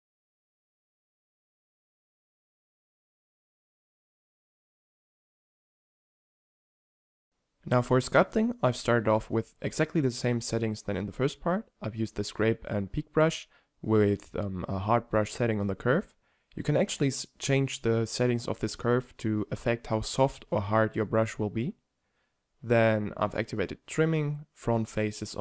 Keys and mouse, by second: 0.0-2.3 typing, 1.4 click, 2.1-2.7 middle drag, 3.7-4.7 middle drag, 4.7-5.2 drag, 5.3 click, 5.8 m, 6.5 t, 6.7 t, 10.5-11.4 middle drag, 14.7-18.1 drag, 18.2 shift+f, 19.8-21.5 drag, 20.4 shift+f, 24.1 f.